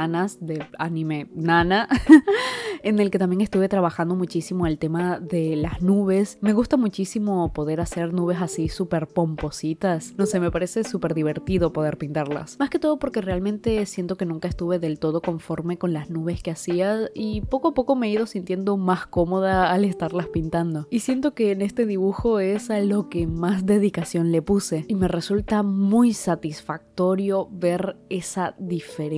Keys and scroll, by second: 10.6 [, 10.8 [, 10.9 [, 11.0 [, 13.6 space, 16.0 space, 18.0 ctrl+z, 19.4-21.0 typing.